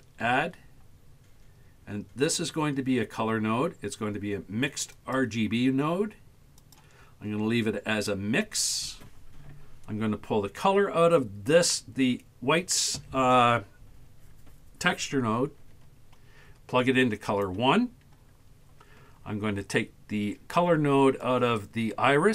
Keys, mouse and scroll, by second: 0.3 shift+a, 10.6-17.4 drag, 21.3-22.3 drag.